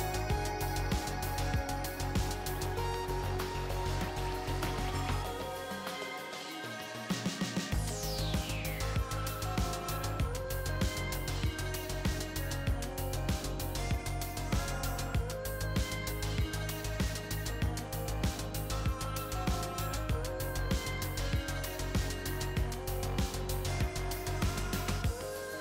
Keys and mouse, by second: 2.8 KP_3, 8.6-10.1 drag, 11.0-12.2 drag, 17.2-18.3 drag, 18.7-20.0 drag, 22.5-23.7 middle drag, 23.7 KP_3, 24.0 KP_1.